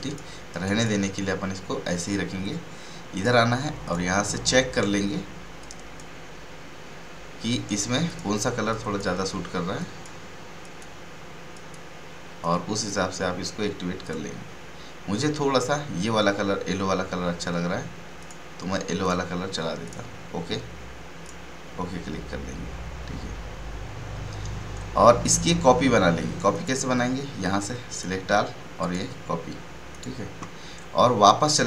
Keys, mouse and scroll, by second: 0.0 space, 0.5 right click, 0.7 space, 3.1-14.0 drag, 18.2 click, 26.5 click.